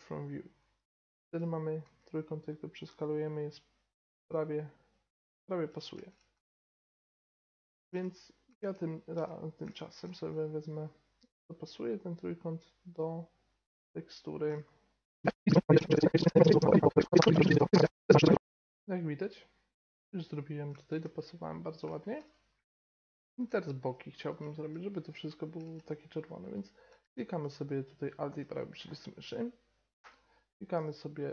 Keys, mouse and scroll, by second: 1.8 s, 6.3 s, 7.5-10.5 middle drag, 10.2 g, 14.3-15.8 middle drag, 15.6-18.0 typing, 15.8 right click, 16.2 middle click, 16.4 right click, 16.8 middle click, 17.2 right click, 17.7 middle click, 18.2-20.3 middle drag, 18.3 Tab, 21.8-26.4 middle drag, 26.4-28.0 right drag, 27.8 middle click, 30.0 y.